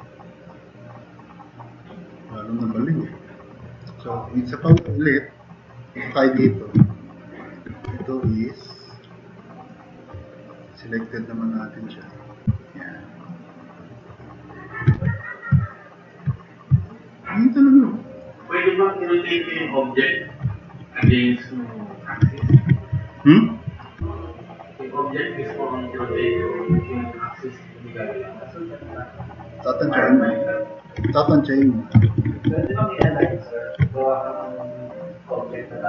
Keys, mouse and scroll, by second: 0.5 click, 4.8 2, 7.9 w, 15.0 w, 19.0-19.7 drag, 22.6 ctrl+z, 31.1 ctrl+z, 32.1 ctrl+z, 32.3 ctrl+z, 32.5 ctrl+z, 32.7 ctrl+z, 33.1 ctrl+z.